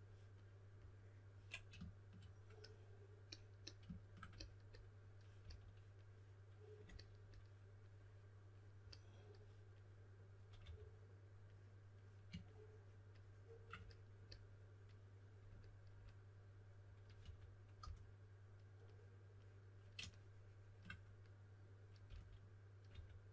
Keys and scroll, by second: 5.4 s, 10.6 3, 17.1-18.2 typing, 22.0-22.8 typing.